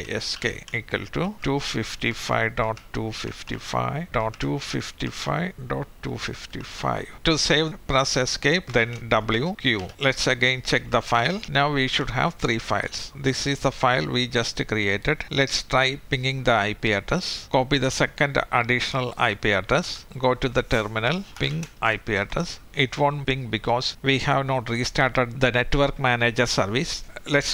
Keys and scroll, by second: 6.9-7.6 typing.